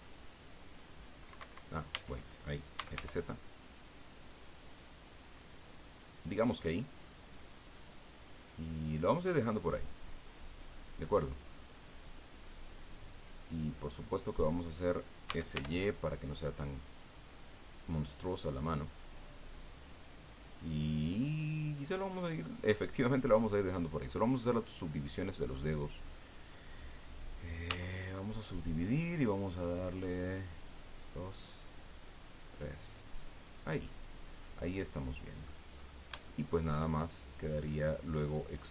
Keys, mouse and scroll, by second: 1.4 Escape, 1.9 Tab, 2.5-3.4 typing, 6.2 click, 7.7-9.0 drag, 9.0-10.4 middle drag, 11.6-14.6 drag, 15.3 s, 15.5 y, 17.9 click, 19.1 click, 21.0 click, 22.0 click, 23.8-24.8 middle drag, 24.9-25.3 scroll up 2, 27.7 w, 28.3 click, 30.5 click, 31.4 click, 34.7 click, 35.7-36.1 scroll up 1, 36.2 shift+middle click, 36.9 shift+middle click.